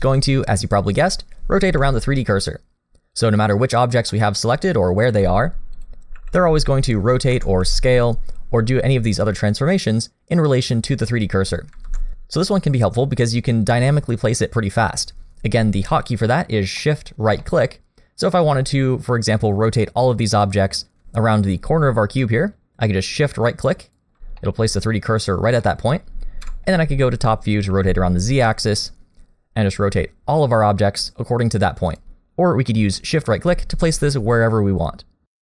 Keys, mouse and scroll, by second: 1.6 r, 4.1 middle click, 5.1 g, 6.2 r, 7.8 s, 11.9 ctrl+z, 16.8 middle click, 17.8-18.2 scroll up 1, 18.3 middle click, 18.7-20.4 scroll up 2, 20.4 middle click, 23.8 shift+right click, 24.4 middle click, 25.3 scroll down 2, 25.6 middle click, 26.0 scroll down 1, 26.4 KP_7, 27.0-27.7 scroll down 1, 27.7 r, 32.8 shift+right click, 33.5 shift+right click, 34.2 r.